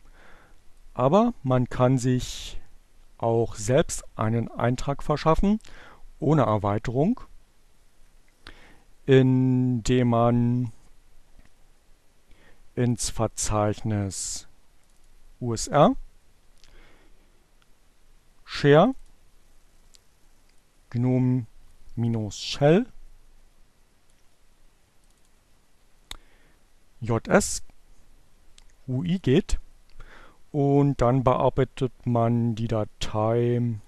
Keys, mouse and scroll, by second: 0.0 click, 1.6 click, 6.2 click, 14.3 click, 16.2 click, 19.6 click, 21.5-24.9 drag, 25.5 click, 27.0 click, 28.6 click, 31.1-33.8 drag.